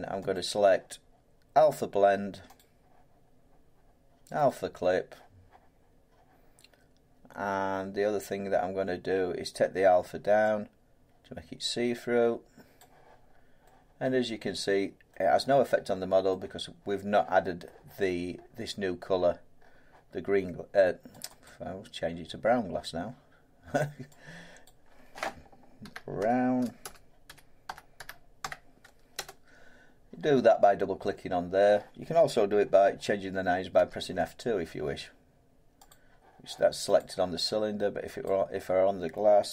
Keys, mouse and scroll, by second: 0.3 middle click, 0.3 click, 1.7 click, 2.5 click, 4.4 click, 12.7 click, 13.2-13.6 scroll, 14.4 scroll down 4, 15.1 middle click, 15.7 scroll down 4, 17.1-17.6 scroll, 18.4-19.6 scroll, 21.2 click, 21.4 click, 24.6 click, 25.8-29.1 typing, 33.7 F2, 35.9 click, 37.0 click, 38.2 click.